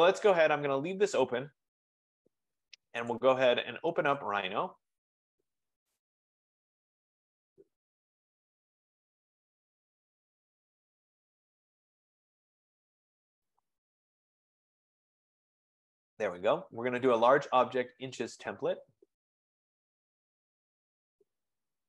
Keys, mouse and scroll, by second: 1.5 click, 3.3 click, 4.5 click, 6.1 click, 6.3 click, 18.1-19.8 drag, 21.8 click.